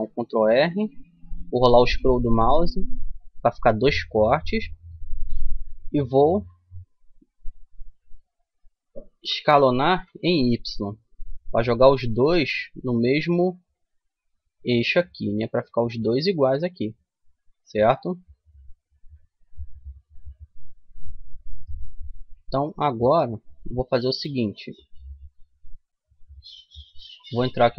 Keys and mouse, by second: 15.1-16.7 middle drag, 21.7 middle click, 26.7 middle click.